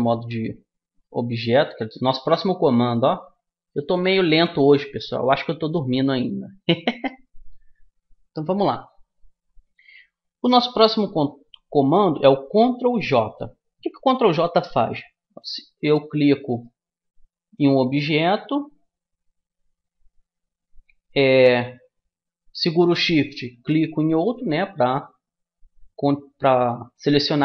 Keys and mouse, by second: 2.5 middle click, 2.9-4.5 middle drag, 4.7 middle click, 6.1 middle click, 6.3-13.9 middle drag, 16.5-18.3 right drag, 23.4-25.2 right drag.